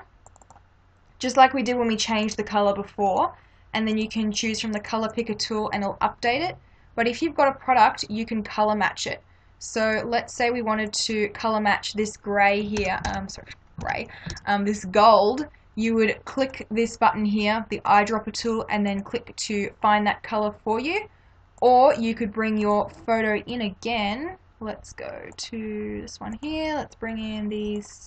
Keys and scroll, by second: 12.8 ctrl+=.